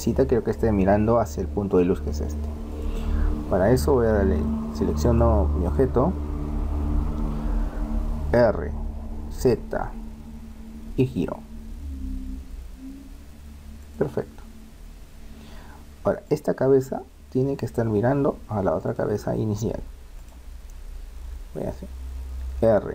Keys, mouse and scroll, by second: 1.7-7.5 right drag, 8.4 r, 15.0 middle click, 15.5-16.3 scroll down 1, 16.3-18.2 right drag, 18.8-21.9 right drag, 22.0 middle click, 22.5 r.